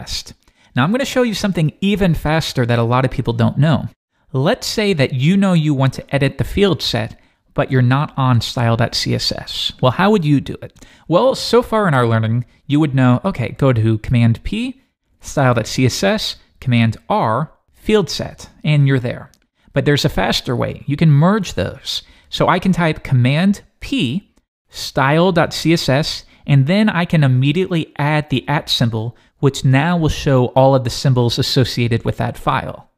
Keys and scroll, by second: 13.4 super+p, 15.9 Return, 16.8 super+r, 23.9 super+p, 28.6 shift+2.